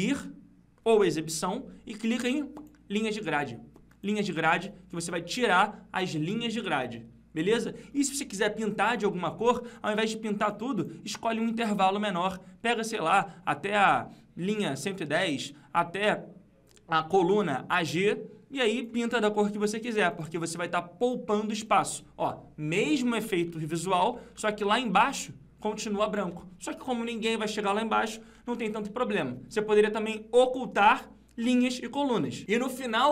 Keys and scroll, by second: 23.8 ctrl+Left, 24.3 ctrl+Down, 28.3 ctrl+Up.